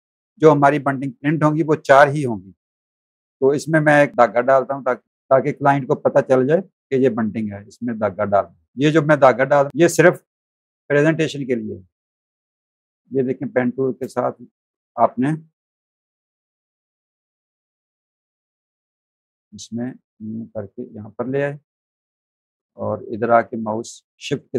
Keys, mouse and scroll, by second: 0.0 alt+click, 2.7 v, 3.1 click, 4.8 click, 8.7 click, 13.4 space, 15.5 p, 16.8 space, 16.9 click, 17.8 click, 20.8 click, 21.3 space, 21.5 click.